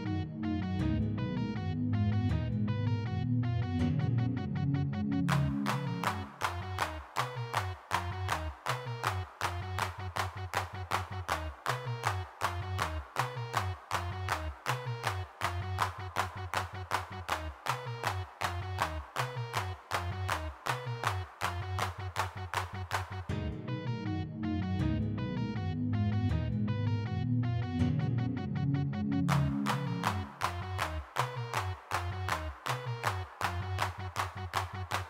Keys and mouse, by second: 0.2 middle click, 1.1-3.1 middle drag, 3.8-5.9 drag, 5.9 middle click, 6.3 middle click, 6.9 3, 6.9 f, 7.4 click, 8.3 f, 10.9-17.1 middle drag, 17.1 g, 17.2 f, 17.6 f, 18.2 click, 19.9 click, 20.3 3, 20.3 f, 21.1 click, 21.3-22.6 drag, 23.3-25.6 drag, 25.7 g, 25.8 f, 26.4 click, 27.2 f, 28.9 3, 29.1 f, 29.5 click, 31.1 click, 31.3 shift+x, 32.2-33.8 middle drag, 34.4 middle click.